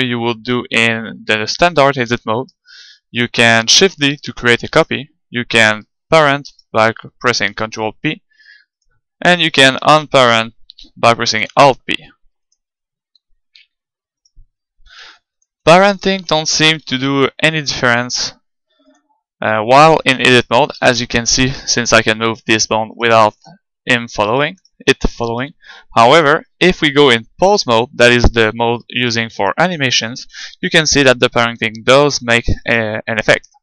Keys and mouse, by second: 3.9 shift+d, 5.0-6.8 drag, 6.5-8.9 right drag, 7.5 ctrl+p, 9.5-11.4 right drag, 11.4 alt+p, 13.3 g, 14.3 click, 14.8 right click, 15.1 g, 16.9 ctrl+p, 17.3-19.0 right drag, 20.3-22.0 right drag, 21.0 g, 23.0-27.6 right drag, 23.7 g, 26.2-28.0 drag, 29.0-31.1 right drag, 30.4 r, 32.8-33.6 right drag.